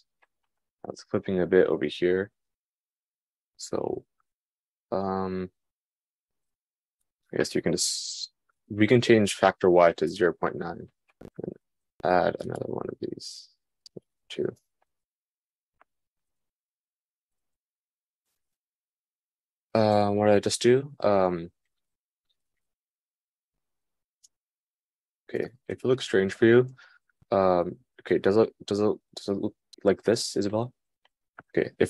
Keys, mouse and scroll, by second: 19.6 super+z, 19.8 super+z, 20.6 super+z, 22.1 super+z, 23.0 super+z, 23.4-26.2 super+drag, 25.9 super+z, 26.2 super+z, 27.3 super+z, 27.3-31.8 super+drag.